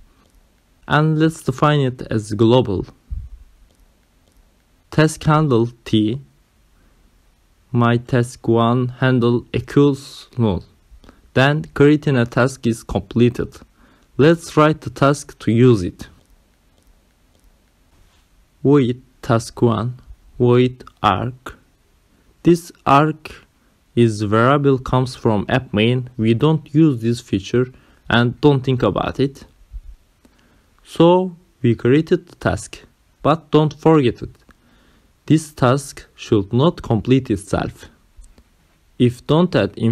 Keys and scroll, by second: 0.0-0.6 typing, 3.6-13.3 typing, 14.4 shift+,, 16.5 Return, 18.4-22.1 typing, 22.4 Right, 26.7 ctrl+alt+7, 27.4 Left, 29.2 Return, 31.0 Down, 31.9 Return, 32.3 Up.